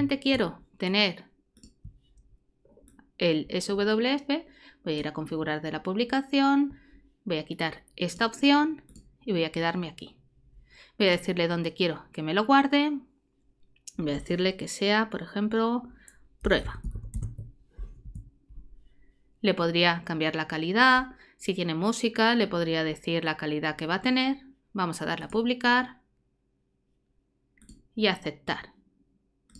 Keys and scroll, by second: 16.2-17.7 typing, 18.0 Return.